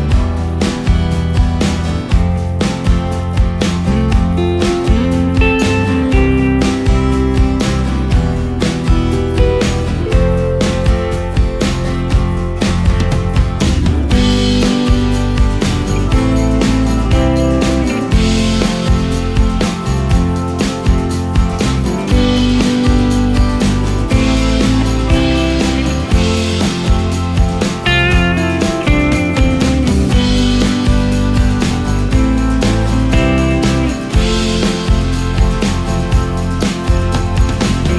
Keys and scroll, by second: 9.5 i, 12.8 ctrl+space, 20.5 ctrl+space, 35.2 shift+space, 36.3 ctrl+shift+space.